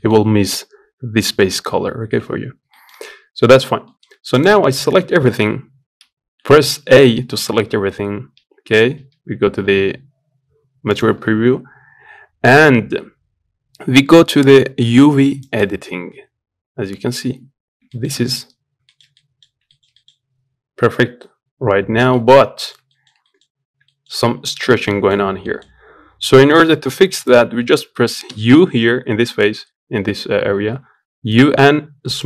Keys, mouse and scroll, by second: 3.4 scroll down 4, 3.6 middle click, 4.1 click, 4.5 Tab, 5.9 a, 7.1 z, 8.8 z, 15.3 click, 17.3-17.6 scroll down 2, 17.6 shift+middle click, 18.0 z, 18.3 scroll up 1, 18.6-32.2 shift+middle drag.